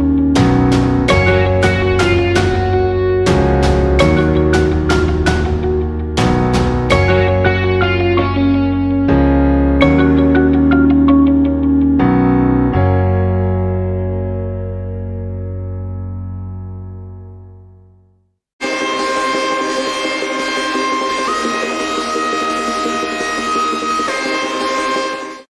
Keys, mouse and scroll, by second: 2.8 click, 11.4 click, 13.0 alt+scroll up 1, 15.0 alt+scroll up 1, 15.3 space, 15.4 click, 15.8 space, 16.9 space, 17.9 alt+scroll down 1, 18.2 space, 18.4 click.